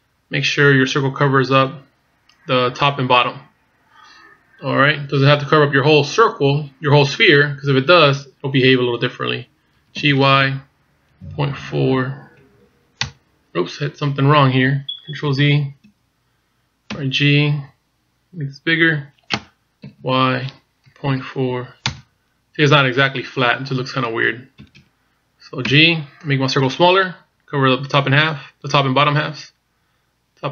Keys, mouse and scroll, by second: 14.5-15.5 scroll up 2, 15.5 ctrl+z, 16.0-16.4 scroll down 2, 17.0 g, 24.7 ctrl+z, 25.7 g.